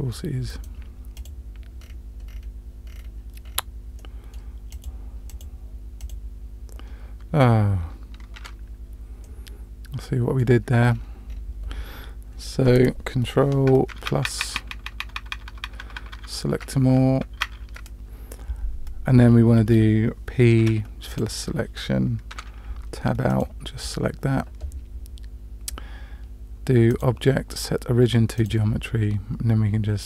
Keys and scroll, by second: 8.4 Tab, 14.1 ctrl+KP_Add, 14.2 ctrl+KP_Add, 14.4 ctrl+KP_Add, 20.6 p, 22.3 Tab.